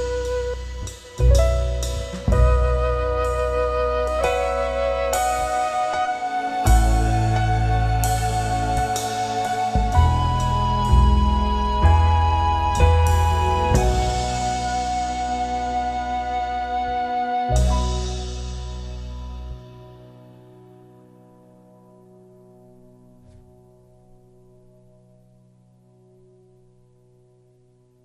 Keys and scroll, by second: 0.8 ctrl+KP_Subtract, 6.8 ctrl+space, 7.3 ctrl+w, 7.8 Return, 9.7 c, 10.4 Return, 12.0 shift+F2, 12.8 ctrl+space, 14.0 space, 14.6 ctrl+w, 14.9 Return, 16.3 alt+space, 16.6 c, 18.8 Left, 19.6 Return, 20.8 ctrl+KP_Add, 21.5 space, 22.8 ctrl+space, 23.6 ctrl+b, 24.6 Return, 25.4 ctrl+g, 26.9 ctrl+space, 27.6 Return.